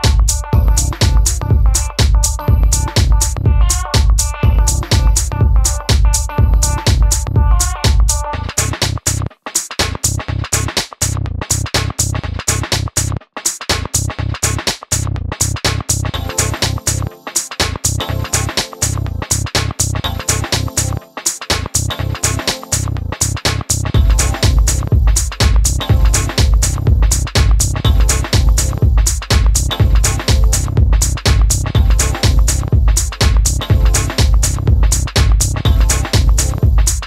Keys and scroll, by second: 9.9 super+d, 19.7 d, 25.1-26.2 typing, 30.1-31.1 typing, 33.1-34.4 typing.